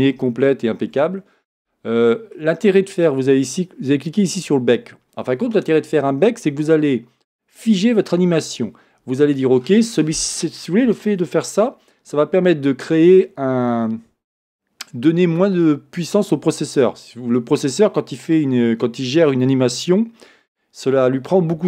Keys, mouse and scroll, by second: 1.1-21.6 middle drag, 1.1-2.1 scroll down 1.